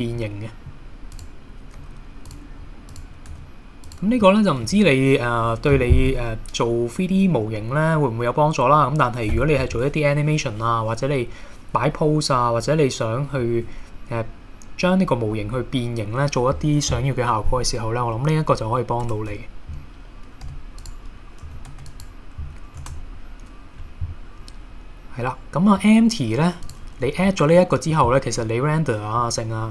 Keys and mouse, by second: 0.2 middle click, 1.8 g, 2.3 click, 3.3 g, 3.9 click, 4.3-4.6 middle drag, 4.8 KP_1, 19.0 Tab, 20.5 x, 21.4 a, 21.7 x, 22.8 shift+a, 27.6-28.0 middle drag, 28.4-29.3 middle drag.